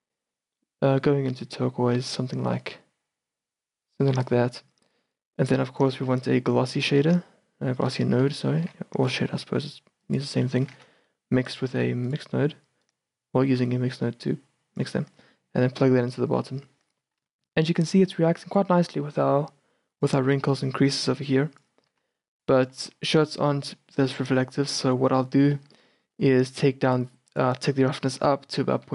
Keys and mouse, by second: 6.7 click, 7.2 shift+a, 10.8 shift+a, 13.8-16.5 drag, 18.1 shift+b, 19.2 shift+b, 20.5 shift+b, 22.1 shift+b, 22.9 shift+b, 24.4 shift+b, 27.0 click, 27.8-28.9 middle drag.